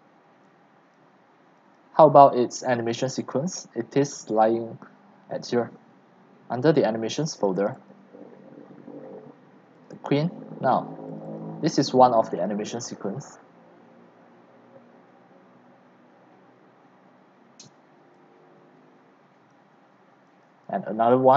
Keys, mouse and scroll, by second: 4.1 click, 7.5 click, 9.8 click, 11.1 click, 13.5-16.2 drag, 18.0 click, 19.5 alt+click, 20.3 alt+click, 20.7 right click.